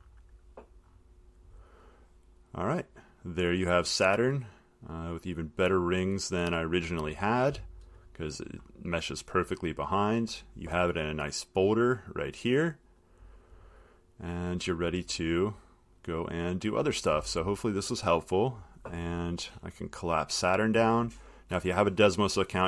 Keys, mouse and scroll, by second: 1.1 middle click, 2.4 scroll, 6.9 click, 8.0-8.8 scroll, 10.2-10.6 scroll, 11.9 click, 13.3 click, 16.9 click, 20.2 click, 21.4 click.